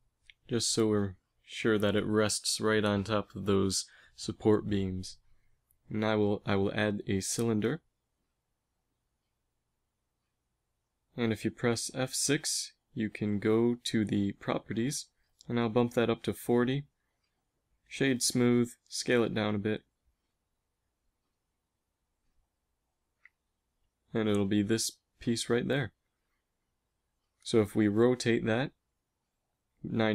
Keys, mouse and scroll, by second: 2.5 middle click, 3.9 a, 5.9 shift+a, 11.4 F6, 16.4 space, 18.3 s, 21.4 KP_1, 27.8 r.